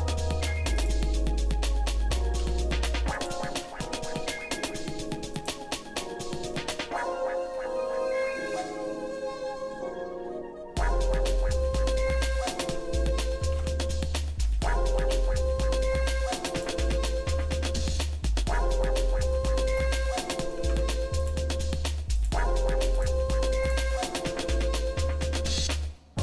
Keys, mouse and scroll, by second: 0.4 Tab, 0.8 click, 2.4 s, 3.8 g, 5.8 shift+middle click, 7.5 shift+middle click, 8.2 shift+middle click, 12.7 ctrl+z, 13.7 ctrl+z, 14.6 g, 17.0-18.5 shift+middle drag, 19.1-19.4 scroll down 1, 19.9 scroll up 1, 20.5 scroll up 1, 20.6 ctrl+Tab, 22.2 click, 23.0 alt+shift+click, 23.6 alt+shift+click, 25.2 ctrl+b.